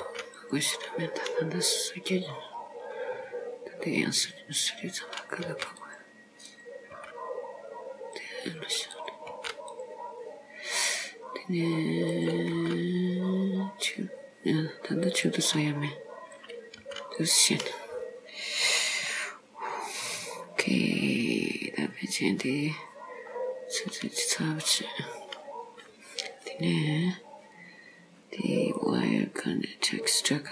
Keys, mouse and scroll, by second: 0.1 g, 1.4-2.2 scroll down 3, 2.2-2.6 scroll up 2, 3.0-3.9 scroll down 1, 3.9 scroll down 1, 5.1 click, 5.6 g, 6.5 click, 7.0 g, 9.0 click, 9.4 g, 12.2 click, 12.6 g, 16.4 click, 16.8 g, 17.7-19.0 scroll down 2, 19.1-19.7 scroll down 3, 19.7-20.1 scroll up 3, 23.4 scroll up 2, 28.8 click.